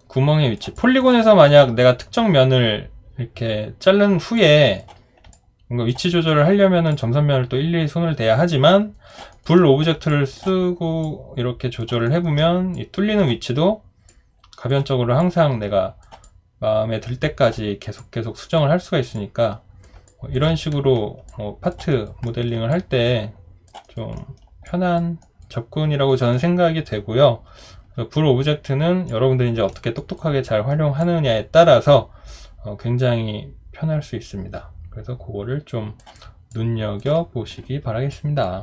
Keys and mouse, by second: 0.7 alt+click, 1.2 alt+right click, 1.5 alt+middle click, 4.4 alt+click, 5.3 alt+click, 6.1 alt+right click, 6.9 alt+click, 9.3 alt+right click, 10.1 alt+click, 12.1 alt+right click, 16.2 alt+click, 20.1 alt+click, 21.3 alt+click, 21.9 alt+right click, 22.3 alt+middle click, 22.7 alt+click, 23.8 alt+right click, 24.2 alt+middle click, 24.7 alt+click, 25.2 alt+right click, 29.1 alt+click, 30.0 alt+right click, 30.4 alt+middle click, 31.0 alt+click, 36.5 alt+click.